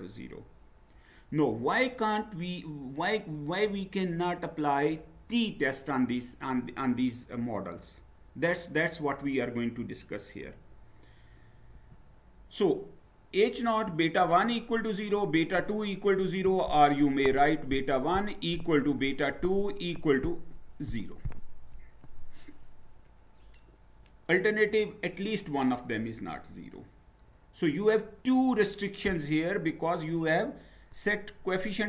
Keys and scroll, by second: 11.7 Down.